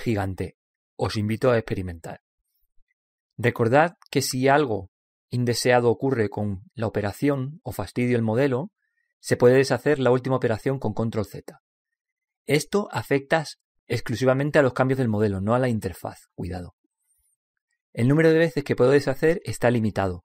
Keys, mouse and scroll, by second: 4.0-5.5 middle drag, 5.5 click, 11.5 ctrl+z.